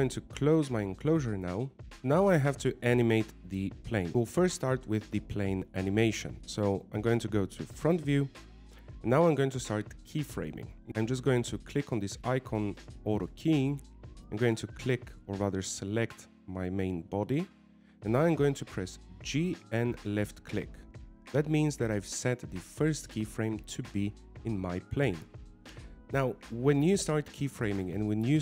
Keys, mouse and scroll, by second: 0.7 z, 2.0 click, 2.1 right click, 3.1 click, 3.7 scroll down 1, 3.8 scroll up 1, 3.8 middle click, 4.1 middle click, 10.6 KP_1, 10.9 shift+middle click, 10.9 scroll down 1, 11.1 w, 15.2 click, 16.4 right click, 21.1 g.